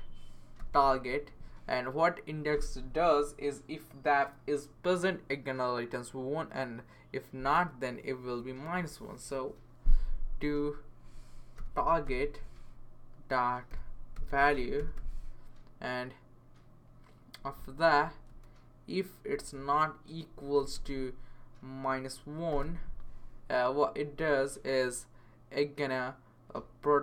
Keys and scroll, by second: 0.6-1.1 typing, 11.3-15.4 typing, 18.0 Right, 18.3 space, 19.5-21.1 typing, 22.2-23.0 typing, 24.1 Right.